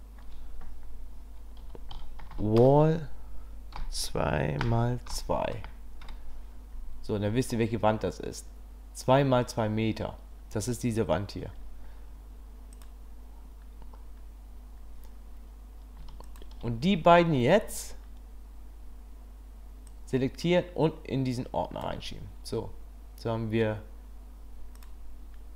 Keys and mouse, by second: 12.7 click, 16.2 shift+click, 20.1-21.8 drag, 24.8 click.